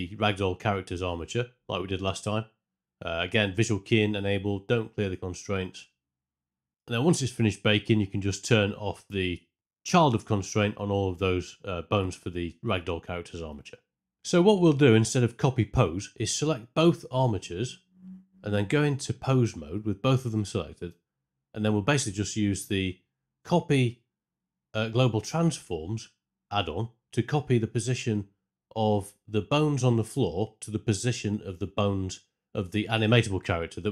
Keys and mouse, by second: 11.3 alt+click, 17.7 ctrl+space, 21.6 Tab, 23.1 click.